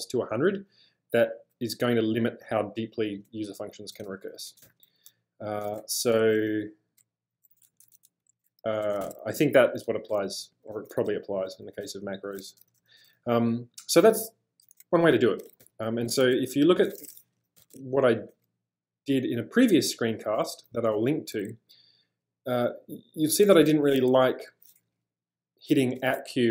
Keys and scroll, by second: 4.6 space, 4.6 h, 6.2 j, 6.4 j, 7.7 ctrl+c, 9.9-13.3 typing, 15.4 typing, 17.6 typing, 19.2 typing, 20.8 k, 20.9 k.